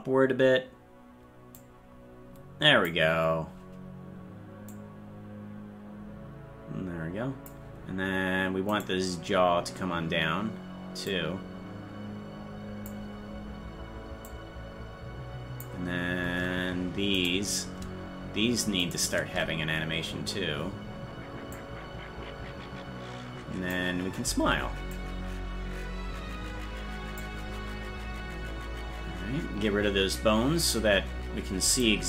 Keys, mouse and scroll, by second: 1.5-2.9 drag, 4.7-7.5 drag, 8.9 right click, 11.1-12.8 drag, 14.2-15.6 drag, 17.3 right click, 19.0 shift+right click, 21.5-23.7 drag, 24.9-27.2 drag, 30.6 click, 31.7 right click.